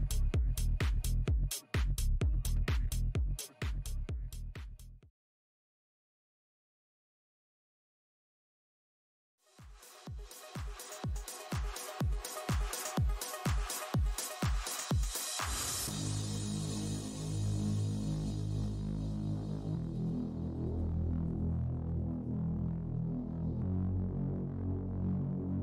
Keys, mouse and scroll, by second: 0.2 click.